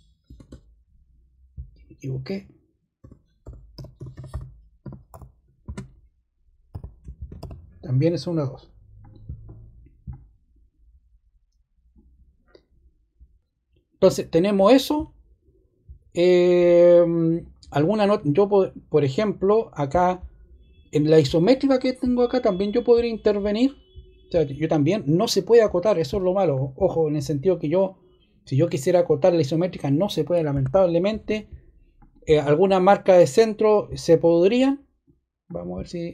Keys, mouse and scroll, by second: 0.0-0.2 typing, 2.9-7.8 typing, 31.9 ▯, 33.4 ▯, 34.4 0.